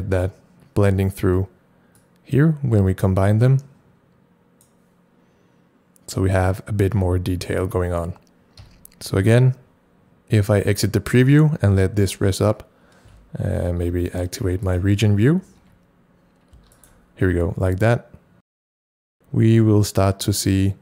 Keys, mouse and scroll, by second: 2.0-14.7 drag, 8.8 c, 13.3 c, 13.7 ctrl+shift+r, 15.5 ctrl+shift+e, 16.7 ctrl+shift+r, 16.8 ctrl+shift+click, 18.2 ctrl+shift+click.